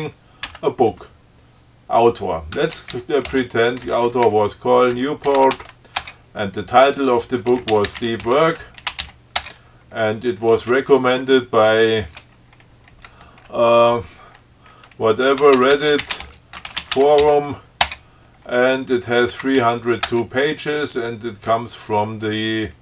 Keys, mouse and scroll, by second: 0.7 b, 2.6-6.3 typing, 7.5-9.6 typing, 15.4-18.0 typing, 18.2 Return, 19.2-20.3 typing.